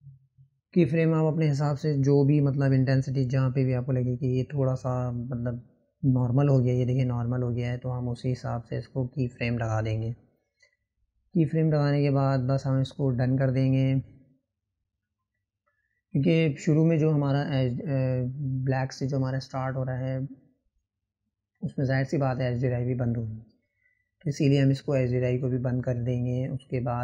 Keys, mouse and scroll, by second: 2.0 click, 2.9 click, 4.4-7.0 drag, 13.7 click, 14.7-17.8 drag, 25.0 Left, 26.9 Left.